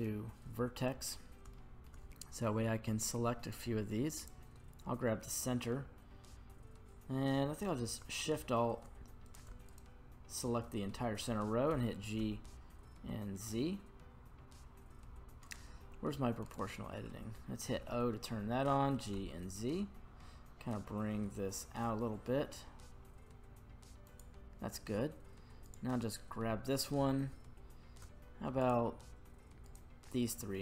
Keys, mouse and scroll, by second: 1.2 scroll down 1, 1.5 shift+middle click, 2.3-2.8 scroll up 1, 3.5 click, 9.3 right click, 9.7 alt+shift+right click, 11.7 g, 12.2 z, 16.4-17.7 right drag, 17.7 o, 18.6 g, 19.1 z, 20.2-20.8 scroll up 1, 20.8-23.6 scroll down 1, 23.6-24.0 scroll down 7, 24.0 click, 25.7 right click, 28.6 shift+right click, 29.7 shift+right click.